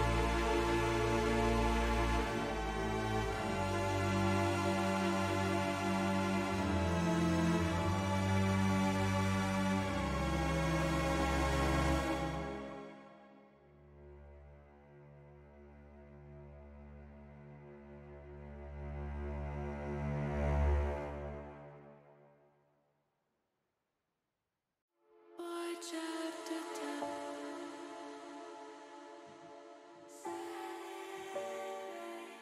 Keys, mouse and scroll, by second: 1.0 alt+shift+click, 2.0 click, 2.5 middle click, 3.8 middle click, 5.3 click, 6.0 shift+click, 7.1 click, 8.2 alt+shift+click, 9.5 click, 10.3 click, 11.0 shift+click, 11.5 shift+click, 12.9 shift+click, 13.6 shift+click, 14.0 middle click, 14.8 middle click, 15.7 middle click, 16.7 middle click, 17.2 middle click, 19.0 middle click, 20.0 shift+middle click, 22.5 shift+click, 23.0 middle click, 23.8 middle click, 24.3 middle click, 24.8 middle click, 25.6 middle click, 26.8 shift+middle click, 28.7 u.